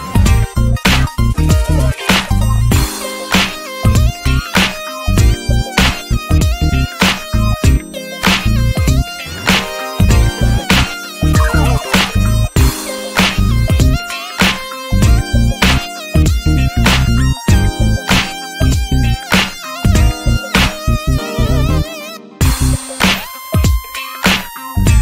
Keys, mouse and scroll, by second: 0.9 click, 1.6 click, 2.1 scroll down 1, 2.4 alt+middle click, 3.1 click, 3.9 r, 4.8 alt+middle click, 5.0 alt+middle click, 5.6 scroll up 3, 5.8-6.5 shift+middle drag, 6.5 r, 7.8 click, 8.4 middle drag, 8.6 scroll up 1, 8.8-9.7 shift+middle drag, 9.7 s, 11.2-12.0 drag, 12.6 click, 12.8-13.1 middle drag, 13.1 s, 14.3 click.